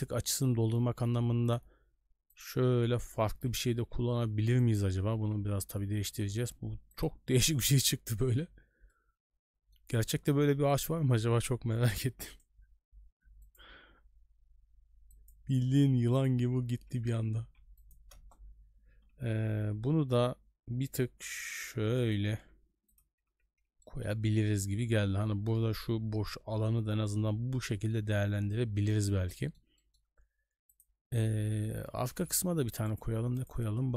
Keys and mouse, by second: 3.0 n, 3.9 s, 5.1 r, 7.6-7.9 middle drag, 8.2 shift+middle click, 8.9-9.7 middle drag, 11.2 n, 12.2-16.5 drag, 16.9 n, 17.4 s, 18.1 KP_0, 18.9 r, 23.1 a, 23.3 a, 23.8 shift+middle drag, 27.7 shift+middle drag, 29.3 middle drag, 29.7 shift+middle click, 30.7 click, 32.3 n, 32.9-33.9 drag.